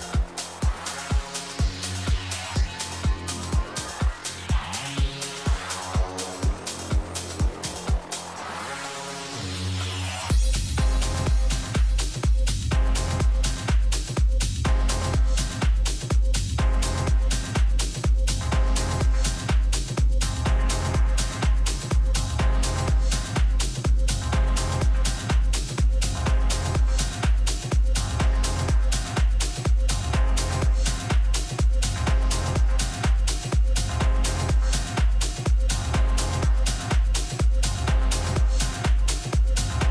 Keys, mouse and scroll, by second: 0.0 r, 6.2-8.2 middle drag, 7.6 a, 8.3-10.8 middle drag, 11.5 middle click, 11.9 z, 12.3-14.0 middle drag, 15.2-17.1 right drag, 25.8-27.8 middle drag, 27.8-31.1 right drag, 29.0 h, 30.1-32.4 middle drag, 35.4-36.6 middle drag, 38.7-39.9 drag.